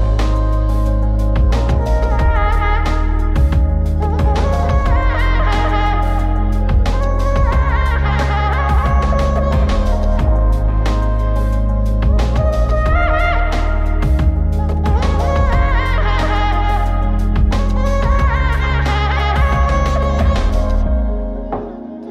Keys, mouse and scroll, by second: 0.5-2.3 drag, 4.1 click, 4.8 click, 6.1 click, 6.5 scroll down 2, 6.8-8.6 middle drag, 8.8 Tab, 11.4 Tab, 12.6 click, 12.9 click, 14.3-16.5 drag, 17.8 click, 19.5-22.0 drag.